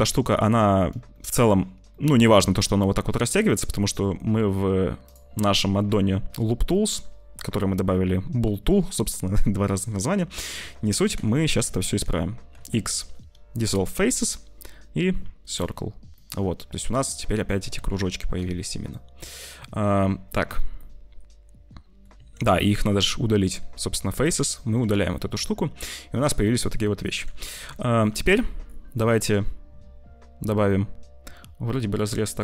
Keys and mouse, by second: 1.0 middle click, 1.8-10.5 middle drag, 10.5 shift+click, 10.6 shift+middle click, 11.5 3, 12.4 x, 15.4 click, 16.0-17.7 middle drag, 17.7 Tab, 18.3 z, 19.0 click, 20.7-22.0 drag, 22.1 Tab, 22.4 click, 22.6 x, 24.5 middle click, 24.7 Tab, 25.3-26.4 drag, 27.0 Tab, 27.4 Tab, 28.2 z, 29.0 middle click, 30.6 middle click.